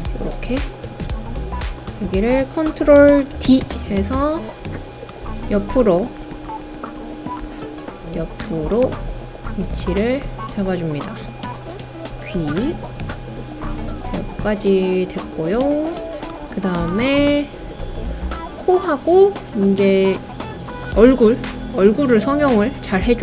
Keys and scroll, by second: 3.3 super+d.